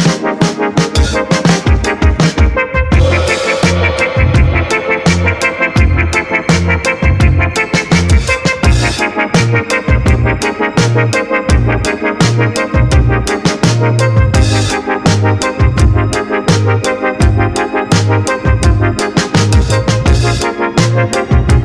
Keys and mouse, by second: 2.4-3.0 drag, 3.3 middle click, 4.5-7.4 drag, 9.9 ctrl+s, 10.5 a, 10.7 click, 11.5 drag.